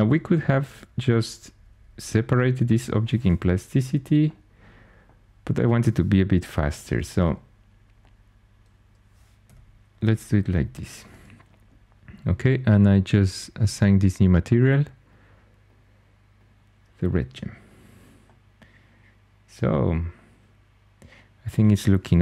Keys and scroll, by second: 0.0-2.6 typing, 4.3-5.1 typing, 6.2 i, 8.3 typing, 9.3-10.4 typing, 17.2 Tab.